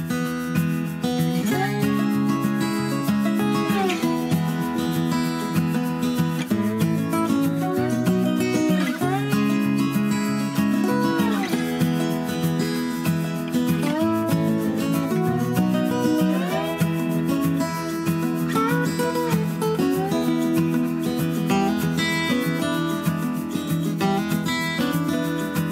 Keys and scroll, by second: 5.2 super+a, 10.3 super+d, 20.0 super+d, 21.7 super+d, 21.9 super+d.